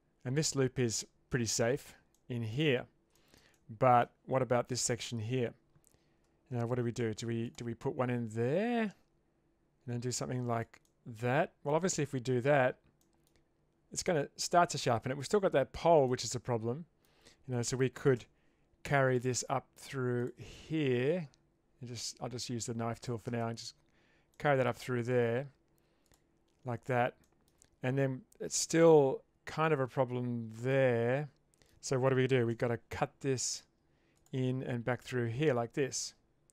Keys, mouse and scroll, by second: 2.1-2.5 middle drag, 3.1 shift+middle drag, 3.5 middle click, 7.0 ctrl+r, 10.8 middle click, 12.0 Tab, 13.0 middle click, 14.0 Tab, 16.2 middle click, 18.1 k, 24.3 middle click, 26.0 click, 27.2 shift+middle click, 30.7-31.7 middle drag, 32.5 k.